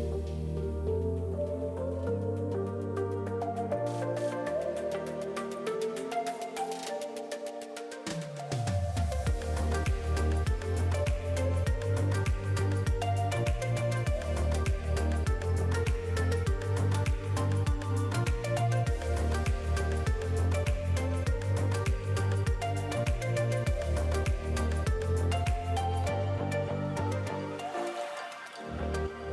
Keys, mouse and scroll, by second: 0.5 middle click, 2.5 click, 6.0 click, 6.6-7.0 scroll up 3, 6.8 middle click, 9.2 KP_3, 10.3 g, 12.5 middle click, 15.8 middle click, 16.5 3, 16.8 click, 17.0 middle click, 18.0 middle click, 18.0 s, 19.8-20.1 scroll down 3, 19.9 middle click, 23.0 click, 23.6 middle click, 26.7 click, 28.2-28.7 scroll up 2, 28.4 Tab, 28.7 middle click.